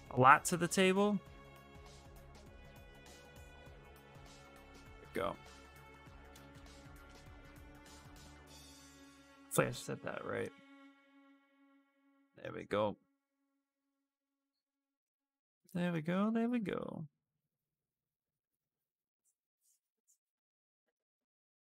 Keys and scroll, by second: 16.2 s.